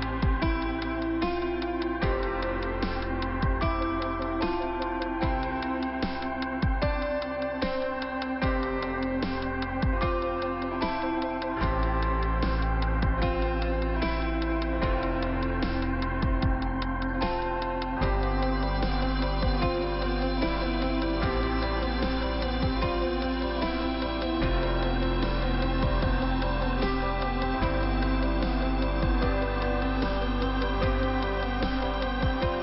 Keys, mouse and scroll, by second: 1.1 right click, 2.0 right click, 3.0 click, 3.1 click, 4.2 click, 4.2 click, 4.6 click, 4.7 double click, 5.2 right click, 5.4 right click, 6.6 scroll up 1, 7.4 click, 9.0 click, 11.7 middle click, 12.7 scroll up 1, 13.1 middle click, 17.5 click, 19.3 click, 20.7 click, 21.3 click, 22.3 click, 24.5 click, 25.0 scroll down 1, 25.9 middle click, 27.1 click, 27.9 middle click, 29.2 middle click, 30.1 middle click, 31.2 middle click, 32.2-32.6 scroll up 1.